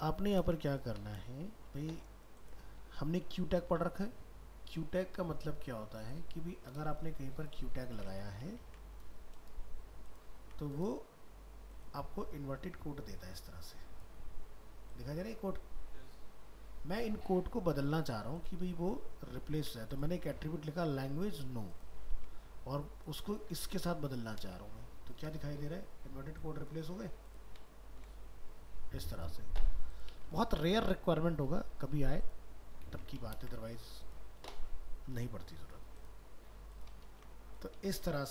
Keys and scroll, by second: 0.1 ctrl+a, 0.4 ctrl+c, 0.9 ctrl+a, 8.6 ctrl+s, 18.0 alt+Tab, 18.7 ctrl+z, 19.6 ctrl+s, 24.6 alt+Tab, 30.3 ctrl+w, 35.8 ctrl+0, 37.2 ctrl+w.